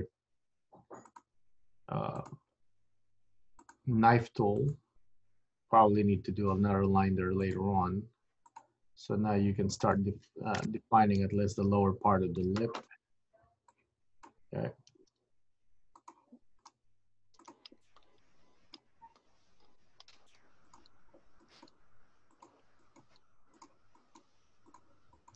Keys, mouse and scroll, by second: 0.0 k, 11.1 scroll up 2, 11.2-12.5 scroll down 4, 12.5 KP_3, 13.1-13.8 scroll up 2, 13.8 click, 15.0 g, 16.8 click, 16.8 g, 18.3 click, 18.9 g, 21.5 click, 21.8 g, 22.9 click, 23.2 g, 24.0 click, 24.3 g, 25.3 click.